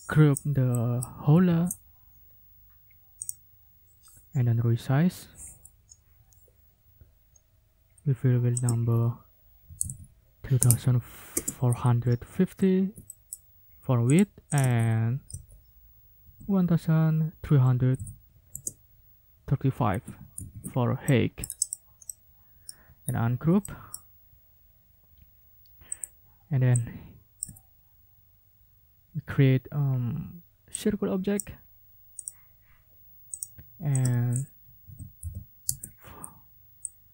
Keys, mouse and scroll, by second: 0.7 ctrl+click, 1.3 ctrl+g, 3.2 click, 8.5 ctrl+click, 8.7 ctrl+a, 9.4-11.1 typing, 11.3 Return, 12.3 ctrl+scroll down 2, 13.0 ctrl+middle click, 14.1 middle click, 14.5 ctrl+middle click, 14.6 ctrl+a, 15.3 1, 16.2 3, 17.4 3, 17.9 5, 18.5 Return, 20.3 ctrl+shift+g, 21.0-21.6 ctrl+shift+scroll up 3, 21.6-22.1 scroll up 3, 22.1 click, 23.0-23.4 ctrl+scroll up 2, 23.6 ctrl+click, 25.9 click, 26.8 ctrl+click, 30.8 click, 32.2 click, 33.4 click, 34.0 ctrl+click, 34.1 ctrl+a, 34.6 ctrl+1, 35.2 6, 35.7 Return, 36.9 click.